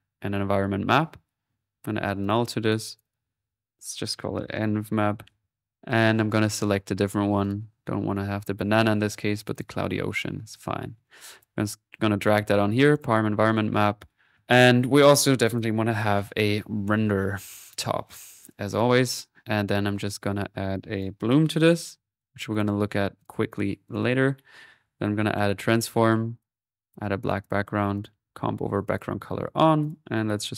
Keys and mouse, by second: 1.5-2.2 typing, 2.3 alt+click, 5.9 click, 6.7-7.9 drag, 10.5-12.0 drag, 11.3 typing, 14.2 middle click, 15.4 click, 15.9-16.7 typing, 17.8-19.3 drag, 21.0-22.4 right drag, 22.2-22.9 typing, 22.6 click, 23.2 click, 23.9 click, 24.7 right click, 25.1-25.9 typing, 25.9 click, 26.4 click, 27.3 click, 28.6 middle click, 28.8 click, 29.8 click.